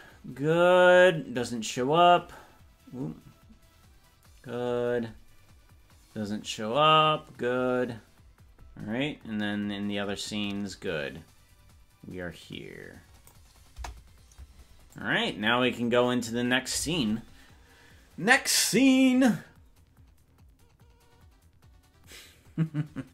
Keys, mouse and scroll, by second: 13.8 KP_0, 15.0-16.7 drag.